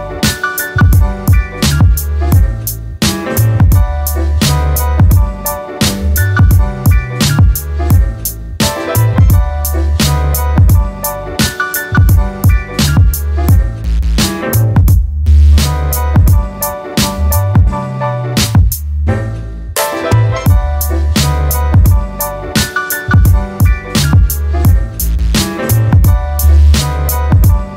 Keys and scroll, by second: 4.5-5.4 typing, 10.6-11.4 typing, 12.7 p, 13.0 Return, 22.3 Escape.